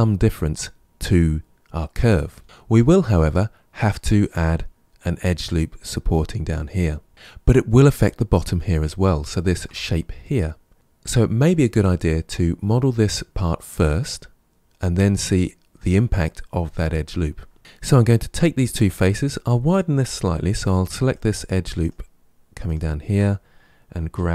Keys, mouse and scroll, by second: 7.1-7.9 shift+middle drag, 8.7-9.2 scroll down 3, 9.2-10.7 shift+middle drag, 20.5 2, 21.0 click, 21.7 shift+click, 22.5 shift+click, 24.0 g.